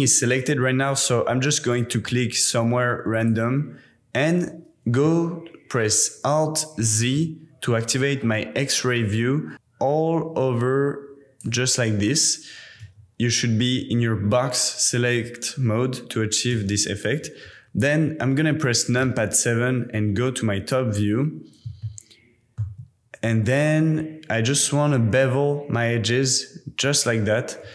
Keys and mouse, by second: 3.1 click, 6.9 alt+z, 9.5-11.4 drag, 12.9 t, 16.5 t, 19.0 KP_7, 21.9 shift+middle click, 25.0 super+b.